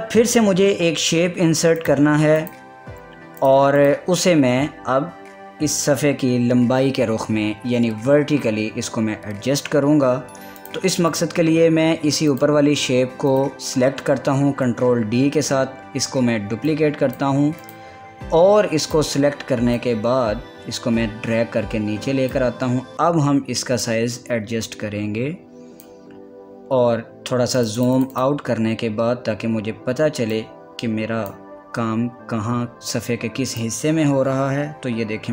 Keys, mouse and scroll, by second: 2.4 click, 3.1 click, 4.4 click, 4.9 scroll down 1, 5.0 scroll up 1, 5.1 scroll down 1, 5.4 scroll up 1, 5.5 scroll down 1, 5.7 typing, 8.6 scroll up 1, 11.2 click, 15.1 ctrl+d, 17.3-28.2 drag, 28.2 click, 30.5 scroll down 1, 30.9-32.4 drag, 32.2 scroll down 1, 34.2-35.3 drag.